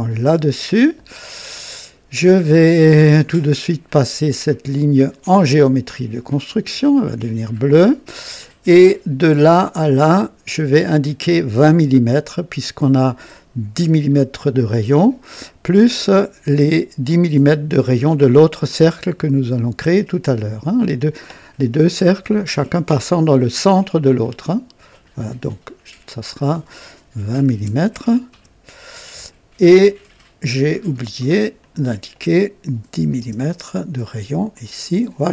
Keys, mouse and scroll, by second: 0.1 o, 4.9 click, 6.1 click, 9.1-10.3 drag, 10.4 click, 24.8 click, 26.3 click, 27.4 KP_2, 27.6 KP_0, 28.2 Return, 30.5 click, 31.6 click, 32.8 KP_1, 33.1 KP_0, 34.2 typing, 34.5 click.